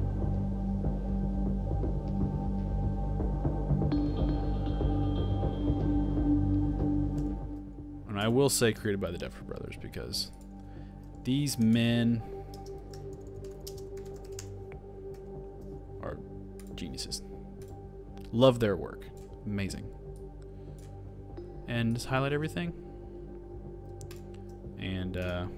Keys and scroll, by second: 0.3 super+d, 0.4 super+v, 2.1 super+v, 3.0 super+d, 3.1 super+v, 6.3 super+v, 6.6-8.3 typing, 11.3-15.2 typing.